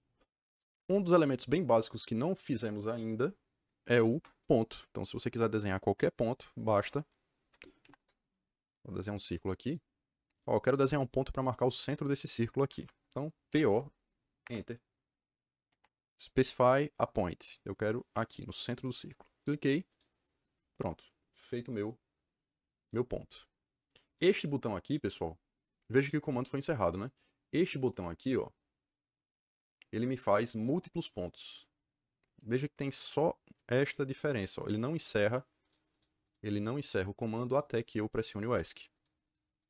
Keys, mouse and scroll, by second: 0.6 Escape, 0.8 Escape, 4.1 Escape, 7.8 c, 7.9 KP_Enter, 8.6 click, 9.6 click, 12.6 Escape, 13.4 p, 14.4 Return, 19.8 click, 27.7 click, 31.3 click, 33.8 click, 34.1 click, 34.5 click, 34.9 click, 35.6 click, 35.9 click, 36.2 click, 36.5 click, 36.8 click, 37.1 click, 37.4 click, 37.7 click, 38.3 click, 38.9 click, 39.2 click, 39.5 click.